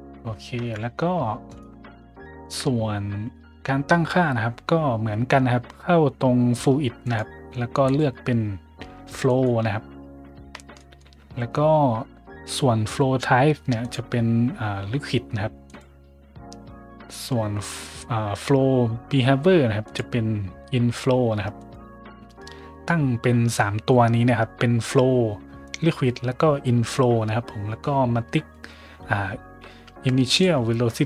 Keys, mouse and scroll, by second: 0.5 `, 1.4 right click, 2.2 shift+middle drag, 6.9 click, 7.8 click, 9.2 click, 10.3 middle click, 10.7 shift+middle click, 13.7 click, 15.6 click, 19.8 click, 21.5 click, 30.2 click.